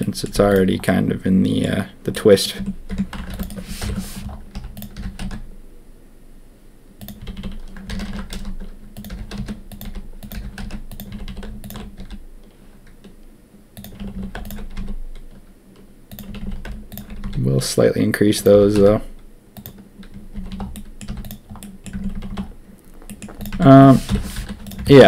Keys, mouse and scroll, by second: 0.3 z, 0.8 middle click, 2.1 click, 2.5 Tab, 2.8 Tab, 3.2 ctrl+r, 3.8 ctrl+KP_1, 4.5 z, 4.9 g, 7.2-11.9 typing, 7.8 ctrl+z, 8.1 ctrl+z, 11.6 alt+click, 13.9 a, 14.1 a, 14.7 s, 16.2 a, 16.3 a, 17.2 s, 18.5 g, 20.3 a, 20.4 a, 20.7 click, 21.0 z, 21.5 click, 21.9 Tab, 22.1 a, 22.2 a, 23.0 drag, 23.5 Tab, 24.0 ctrl+KP_1, 24.3 z, 24.8 shift+click.